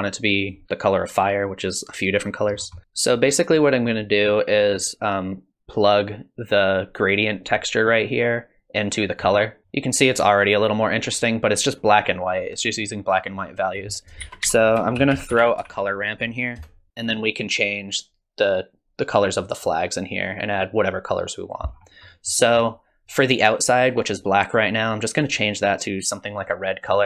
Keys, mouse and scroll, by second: 2.5-2.9 scroll down 5, 2.8 middle click, 2.9 middle click, 2.9-3.5 scroll up 6, 4.9 middle click, 5.9 click, 13.7 click, 14.2 shift+a, 15.6 r, 16.9 click, 20.7 click, 21.7-23.8 scroll up 7, 22.1 middle click, 25.6 click.